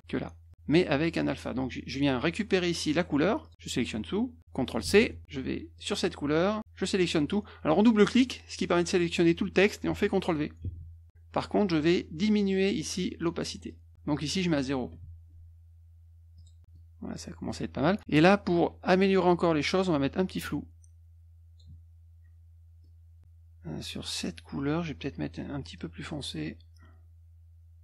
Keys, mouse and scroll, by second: 0.5 click, 3.4 click, 4.8 ctrl+c, 5.7 click, 7.0 click, 8.0 click, 8.2 click, 10.6 ctrl+v, 15.1 click, 15.9 0, 17.7-18.8 drag, 21.2-22.6 drag, 23.2 F2, 26.8-27.8 drag.